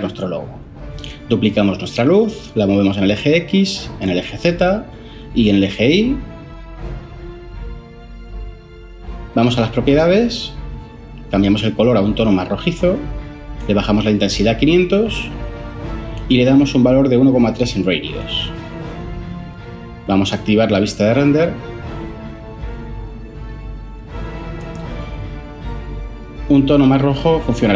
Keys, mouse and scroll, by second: 1.0 shift+d, 1.4 x, 16.1 BackSpace, 16.4 Return, 17.3-17.9 typing.